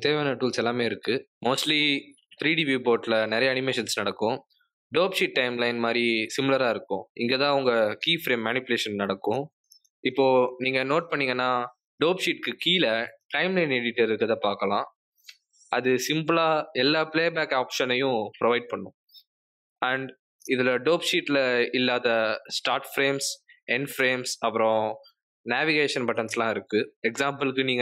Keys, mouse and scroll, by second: 2.0 space, 4.4 Escape, 6.4 g, 7.9 r, 23.0 click, 26.9 click.